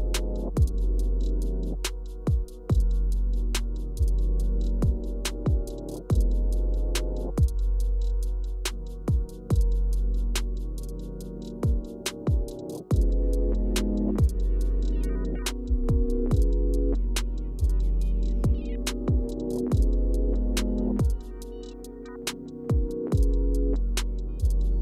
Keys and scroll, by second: 5.7 space, 16.2 Return, 21.1-21.5 typing, 23.7-24.5 typing.